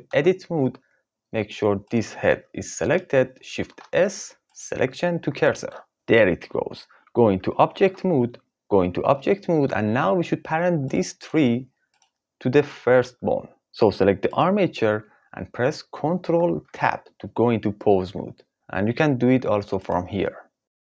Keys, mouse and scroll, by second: 0.0 Tab, 2.2 g, 2.8 click, 3.6 shift+s, 7.8 Tab, 9.1-9.7 shift+drag, 10.8 click, 16.6 ctrl+Tab, 19.8-20.9 drag.